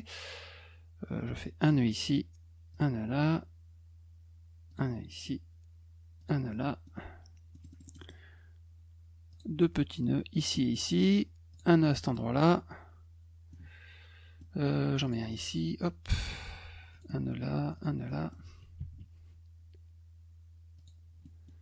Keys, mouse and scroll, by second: 1.6 click, 2.7 click, 4.7 click, 6.2 click, 6.5 middle click, 7.5 middle click, 7.7 middle click, 7.8 middle click, 8.0 middle click, 9.3 click, 10.3 click, 11.5 click, 11.8 middle click, 13.5 middle click, 15.0 click, 15.3 middle click, 16.9 click, 17.7 click, 18.1 middle click, 20.8 click, 21.2 middle click.